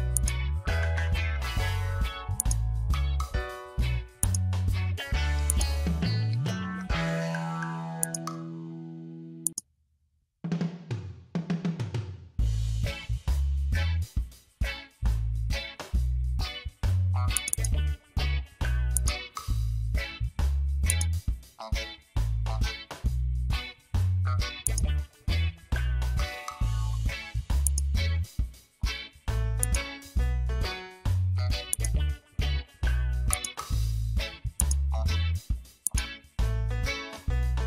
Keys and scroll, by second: 7.3 ctrl+t, 13.2 Return.